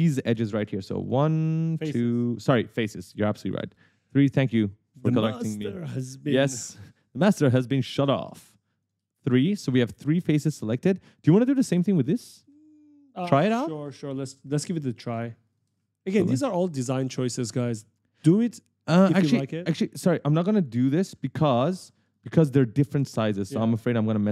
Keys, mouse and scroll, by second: 1.2 shift+click, 1.9 shift+click, 2.2 right click, 3.5 shift+click, 3.9-6.1 typing, 4.0 right click, 5.9 shift+click, 7.3 shift+click, 7.6 right click, 7.7 a, 7.9 w, 9.0 shift+click, 9.6-12.8 typing, 13.2 shift+click, 13.5 right click, 14.5 shift+click, 14.7 right click, 15.7 shift+click, 15.9 a, 16.6 shift+click, 17.0 right click, 17.9 right click, 19.8 right click, 22.2-24.3 typing, 22.3 right click, 23.3 right click.